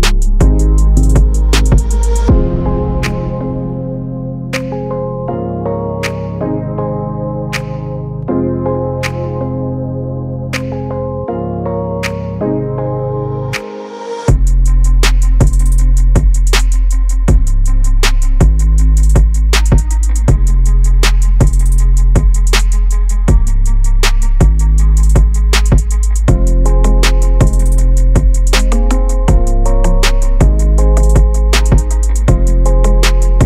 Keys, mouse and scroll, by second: 1.1 g, 3.3 click, 4.1 g, 6.5 click, 9.6 g, 12.2-13.9 drag, 14.4-15.8 drag, 16.2 g, 19.9-21.6 drag, 22.0 g, 25.9-27.2 drag, 27.6-29.3 drag, 30.0 g, 32.1-33.4 drag.